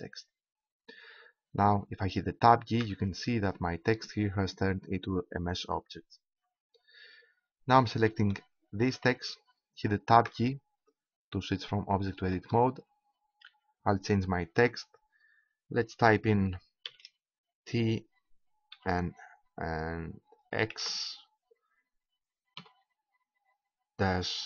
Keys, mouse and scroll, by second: 2.8 Tab, 6.3 Tab, 9.8 right click, 10.2 Tab, 12.1 BackSpace, 12.5 BackSpace, 16.8 shift+t, 18.8 shift+n, 20.7 shift+x, 22.6 -.